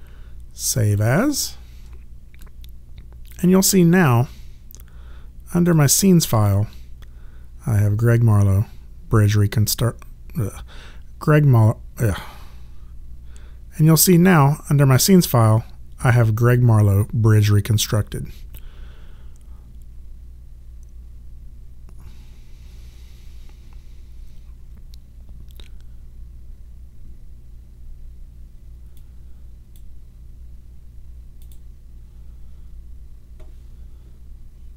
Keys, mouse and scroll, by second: 0.8 click, 3.3 click, 5.7 click, 29.0 click, 31.4 click.